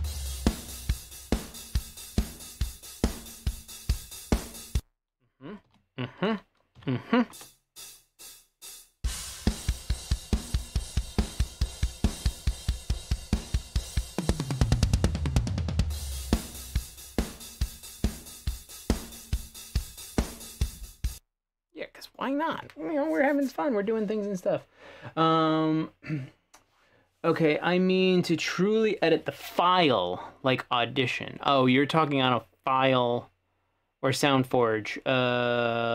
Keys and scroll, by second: 4.9 space, 5.7 p, 6.9 /, 7.4 space, 21.3 space.